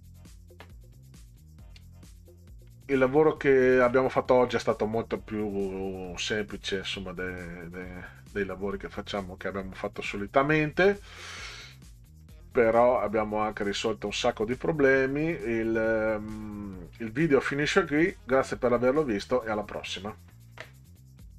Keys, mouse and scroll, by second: 1.2 click, 2.7-3.9 middle drag, 12.2-13.8 middle drag, 21.3 click.